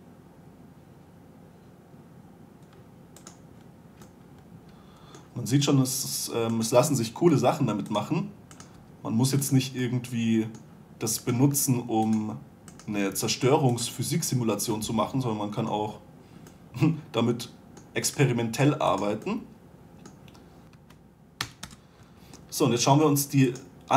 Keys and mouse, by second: 0.0 g, 7.0-8.9 right drag, 7.7 g, 9.0-10.3 right drag, 9.2 g, 10.5 middle click, 11.0-13.4 middle drag, 13.4-14.7 right drag, 13.4 g, 14.7-16.6 drag, 16.6 middle click, 16.9 middle drag, 18.5-19.9 right drag, 18.7 g, 20.7 g, 20.7 a, 21.1 a, 21.9 Delete.